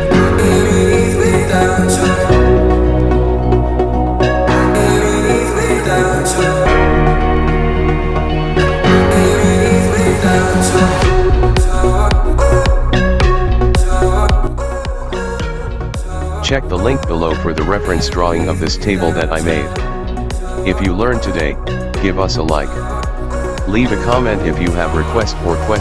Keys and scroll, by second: 23.0 h.